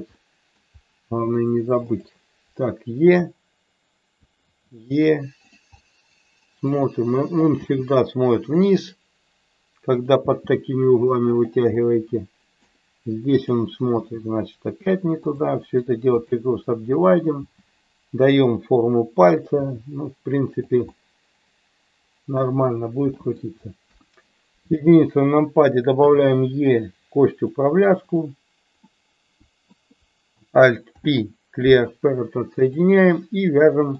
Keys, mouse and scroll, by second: 0.2 middle click, 1.9 click, 3.1 e, 4.2 click, 4.5 e, 5.4 click, 5.8 middle click, 6.5-7.5 scroll down 1, 7.5 g, 8.7 click, 9.9 click, 10.2 g, 11.2 click, 11.8 middle click, 13.9 g, 15.3 click, 15.5 right click, 16.9 click, 17.4 g, 18.3 click, 19.7 g, 20.9-22.4 middle drag, 23.2 middle click, 23.8 KP_1, 25.6 click, 26.0 e, 27.3 click, 28.0 click, 28.8 middle click, 30.9 alt+p, 33.6 middle click.